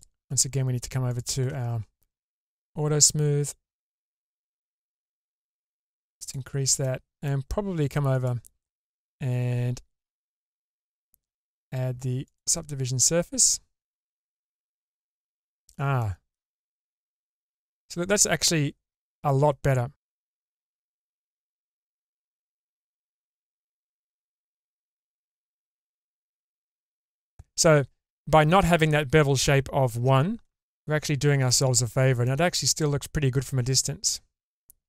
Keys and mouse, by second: 1.1 click, 2.6-6.3 drag, 6.8 middle click, 8.1 click, 10.5-14.1 drag, 14.1-15.7 middle drag, 16.0 shift+middle click, 16.5-22.1 middle drag, 23.0-24.3 drag, 25.1-27.4 middle drag, 30.6-31.4 middle drag, 32.2-34.8 middle drag.